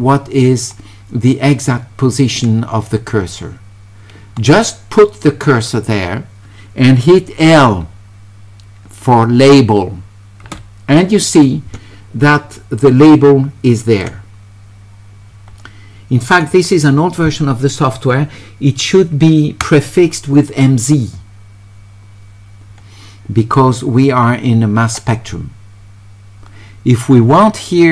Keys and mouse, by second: 12.9-14.0 drag, 16.2 click.